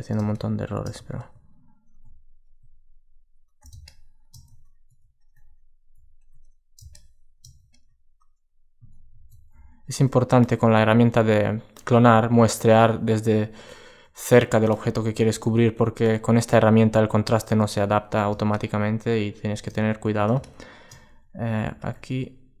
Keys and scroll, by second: 8.8 super+z, 12.4 alt+space.